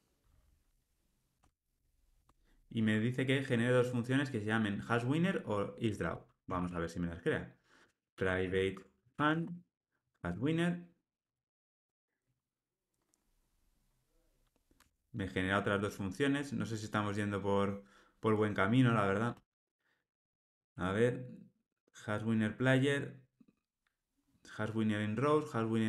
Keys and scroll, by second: 1.3 Tab, 8.7 Tab, 10.4 Return, 14.7 Tab.